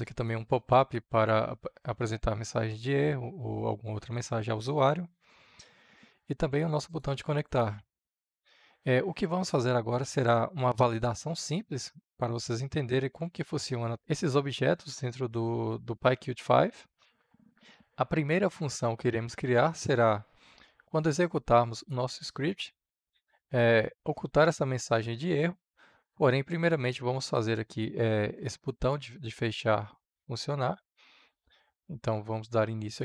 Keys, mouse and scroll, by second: 11.1-12.0 typing, 12.0-33.0 drag.